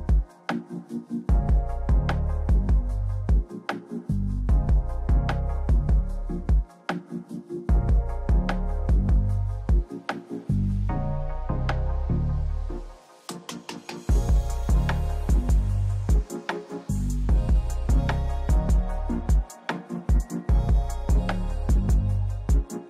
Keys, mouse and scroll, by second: 1.2 click, 1.9 click, 2.7 middle click, 3.7 click, 4.7 middle click, 5.3 click, 6.8 middle click, 9.4 click, 11.3 Up, 11.6 right click, 12.6 right click, 13.3 click, 14.1 click, 15.1 click, 15.3 click, 16.7 click, 17.7 click, 18.2 click, 19.5 click.